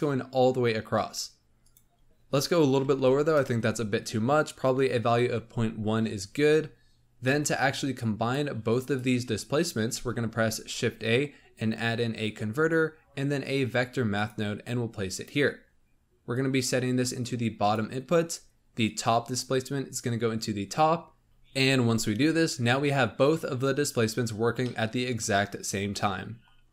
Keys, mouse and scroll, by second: 0.0 scroll down 1, 1.6-4.6 drag, 6.7-7.1 scroll down 3, 7.1 middle click, 7.9-8.7 drag, 9.8 shift+a, 16.3-18.9 drag, 24.5-26.7 middle drag.